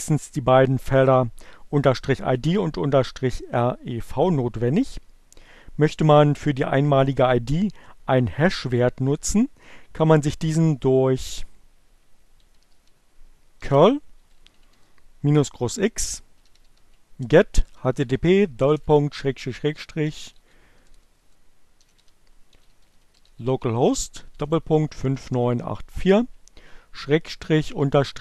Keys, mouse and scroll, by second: 11.9-15.8 typing, 17.2-18.2 typing, 19.8-25.9 typing, 27.6 shift+-.